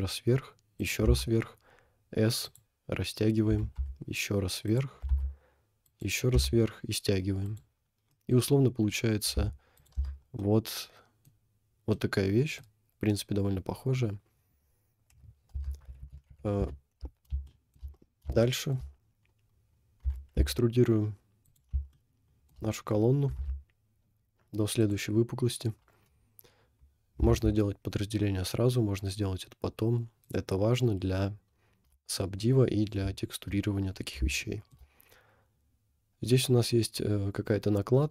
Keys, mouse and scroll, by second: 1.2 s, 3.7 e, 5.0 e, 6.3 s, 7.8 scroll down 1, 8.1 middle click, 8.4-8.9 scroll down 5, 10.0 Tab, 10.2 scroll up 1, 10.5 middle click, 11.4-12.1 scroll up 2, 12.1 middle click, 14.0-14.9 scroll down 2, 15.1 KP_1, 15.5 Tab, 16.1 ctrl+z, 16.6 ctrl+z, 17.5 shift+middle click, 17.9 scroll up 2, 18.6 shift+middle click, 19.0 scroll up 1, 20.2 e, 21.8 shift+scroll up 1, 21.9 shift+middle click, 22.7 scroll down 3, 23.4 g, 27.3 ctrl+r, 31.5-31.9 scroll up 1, 32.2 shift+middle click, 33.5-33.8 scroll up 1, 34.5 shift+middle click, 34.9 scroll up 2.